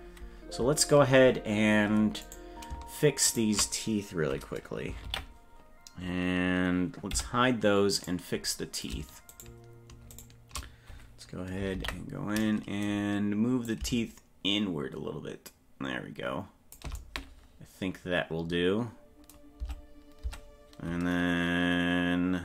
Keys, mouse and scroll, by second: 2.2 right click, 3.3 shift+right click, 5.0 ctrl+l, 7.1 h, 8.0 right click, 9.3 shift+right click, 9.5 shift+right click, 10.3 right click, 11.7 ctrl+l, 13.7-14.8 shift+drag, 19.6 Tab, 20.4 Tab.